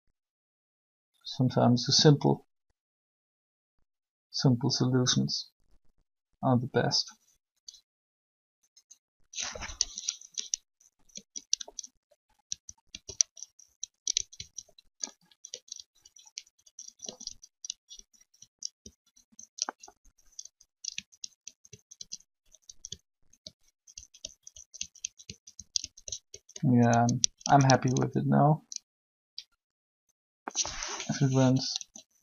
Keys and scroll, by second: 10.0 Left, 10.9 Right, 11.5 Left, 12.0 Right, 12.4 Right, 16.2 Right, 17.9 Left, 19.8 Right, 21.2 Right, 24.0 Right, 31.6 alt+a.